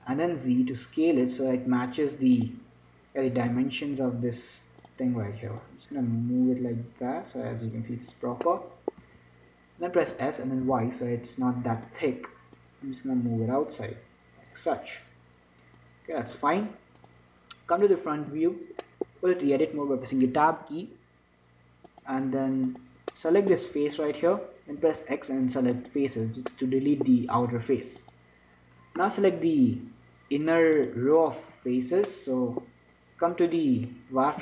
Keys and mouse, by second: 3.5 s, 5.9-7.7 drag, 8.7-11.5 middle drag, 9.3 z, 10.3 s, 13.5-15.1 drag, 16.1-17.3 drag, 18.1-19.2 drag, 18.6 z, 20.8 Tab, 23.4 middle click, 23.9 z, 25.1 right click, 25.1 x, 26.8-28.5 middle drag, 28.5-34.4 drag, 31.8 z.